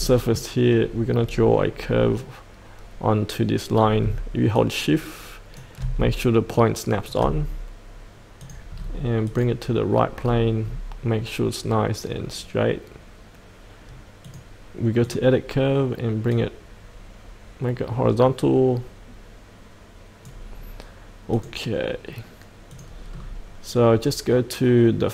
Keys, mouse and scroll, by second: 0.6-4.0 scroll down 1, 4.5 shift+click, 8.4 click, 8.7-9.2 scroll down 1, 9.2 click, 10.2-14.2 scroll down 1, 14.2-20.5 drag, 23.1-24.6 scroll down 1.